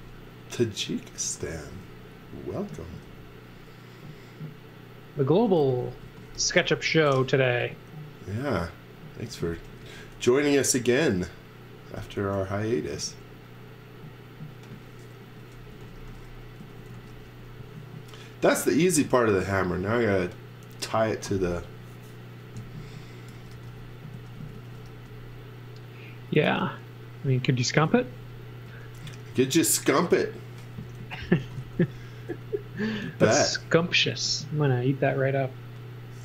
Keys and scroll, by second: 0.0-1.5 typing, 3.0 b, 5.3-7.1 typing, 9.2 space, 9.5 x, 9.8 v, 10.7 m, 12.3 Right, 12.9 Left, 14.9-17.5 typing, 23.0-25.3 typing, 27.9 z, 28.5 space, 30.7-32.1 typing, 33.4 b.